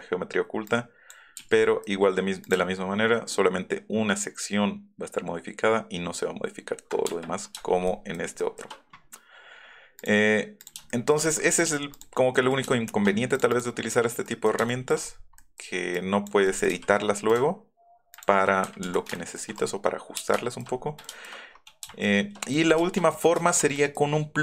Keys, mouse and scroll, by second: 0.7 click, 1.6 click, 2.4 click, 7.6 shift+middle click, 8.3 shift+middle click, 9.9 click, 10.5 click, 10.9 shift+middle click, 11.3 scroll down 1, 11.5 middle click, 11.9 click, 12.1 middle click, 12.3 middle click, 12.8 shift+middle click, 13.3 click, 13.5 click, 14.2 click, 14.7 shift+click, 18.1 ctrl+click, 18.8 ctrl+z, 19.1 shift+click, 19.2 shift+middle click, 20.3 shift+middle click, 21.0 shift+middle click, 22.0 shift+click, 22.7 shift+click, 24.2-24.4 scroll up 6.